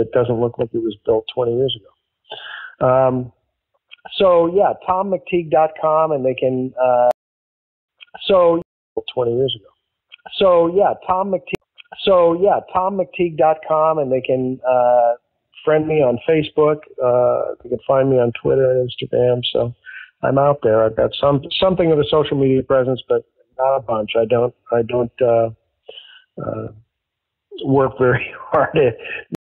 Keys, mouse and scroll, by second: 0.5 click, 1.1 click, 2.0 ctrl+s, 4.3 click, 5.9-7.0 drag, 7.0 space, 7.6 ctrl+shift+Delete, 7.8 space, 8.5 space, 8.8 click, 8.9 space, 11.5 ctrl+z, 12.2 click, 13.8 click, 15.3 click, 16.4-17.6 drag, 18.2 click, 19.1 click, 19.9 ctrl+s, 28.0-29.2 drag, 29.2 space.